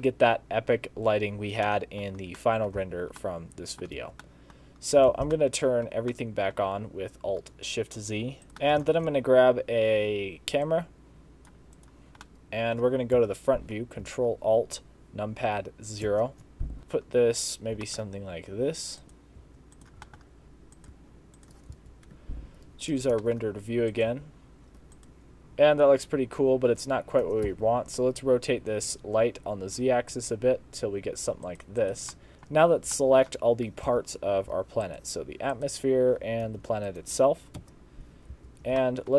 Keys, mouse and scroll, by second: 8.4 click, 8.4 middle click, 8.6 shift+middle click, 9.0 shift+a, 12.3 middle click, 13.2 KP_1, 16.1 ctrl+alt+KP_0, 16.8 shift+middle click, 16.8 g, 17.9 g, 19.4 g, 20.0 g, 21.0 g, 21.8 z, 23.2 g, 24.2 g, 27.3 r, 31.8 click, 32.2 middle click, 32.3 shift+middle click, 32.6 scroll down 2, 33.0 shift+middle click, 33.9 z, 34.9 shift+click, 35.6 shift+click, 36.5 g, 37.6 KP_0, 38.4 z, 38.8 shift+scroll up 1, 38.9 shift+middle click.